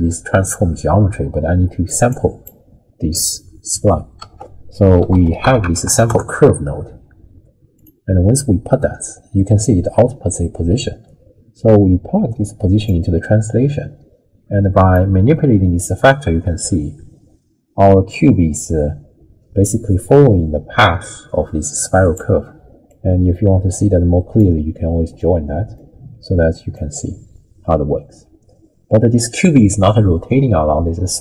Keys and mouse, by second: 2.1 click, 4.2 ctrl+a, 9.6-12.9 drag, 14.9-22.2 drag, 22.9-24.4 drag, 25.3-25.7 middle drag, 26.7-31.2 drag.